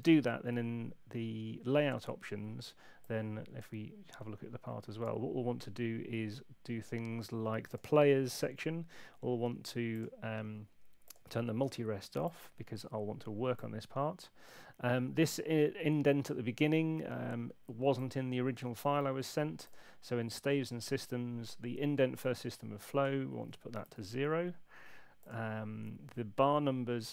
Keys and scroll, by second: 0.0 shift+super+l, 23.7 0, 23.8 Tab.